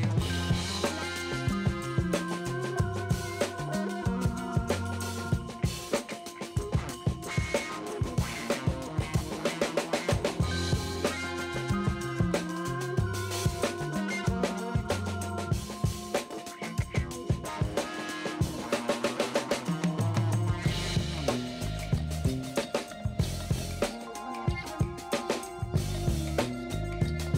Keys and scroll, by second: 6.3 space, 6.6 b, 7.1 ], 8.1 0, 9.4 space, 10.4 F9, 12.3 [, 13.9 [, 14.4 [, 15.8 space, 16.4 ], 18.2 ], 18.9 [, 20.8 ], 21.2 space, 22.4 [, 24.7 space, 25.6 space.